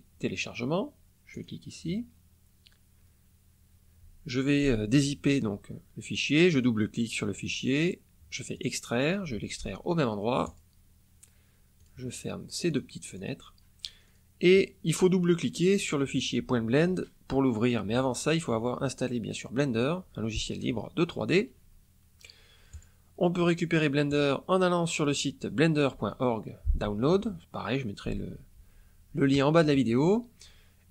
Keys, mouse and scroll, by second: 1.2 click, 6.3 click, 8.5 click, 10.4 click, 11.7 click, 12.6 click, 13.2 click, 14.0 click, 22.7 click, 24.0 click.